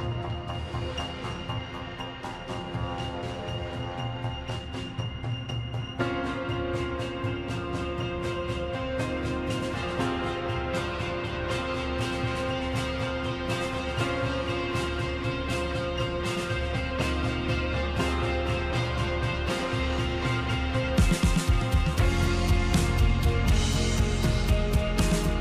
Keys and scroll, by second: 1.7 ctrl+z.